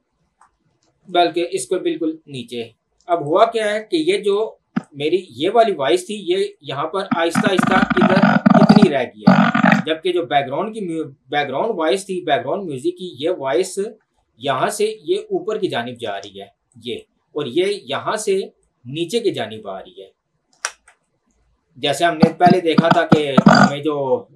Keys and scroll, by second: 0.9 ctrl+z, 14.0 ctrl+2, 20.9 Escape.